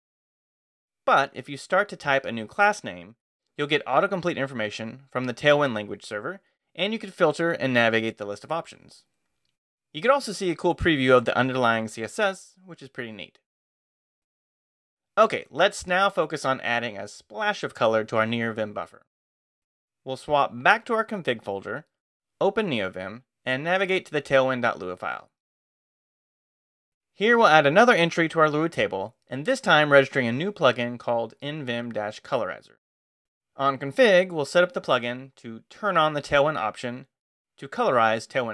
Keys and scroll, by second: 0.3-1.9 typing, 6.9 ctrl+n, 8.9 ctrl+Return, 9.4 space, 13.8 Escape, 15.6 shift+;, 16.9-21.9 typing, 20.9 Return, 23.4-25.5 typing, 26.1 Return, 28.8 p, 29.3 Return.